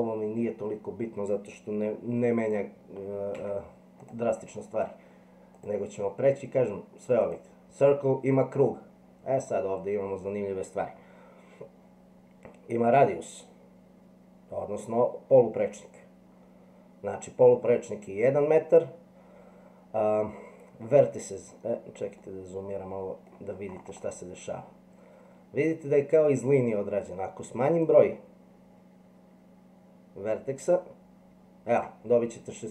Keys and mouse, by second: 2.4 click, 3.4 x, 5.7-7.4 drag, 22.2-23.3 middle drag, 27.8-31.8 drag.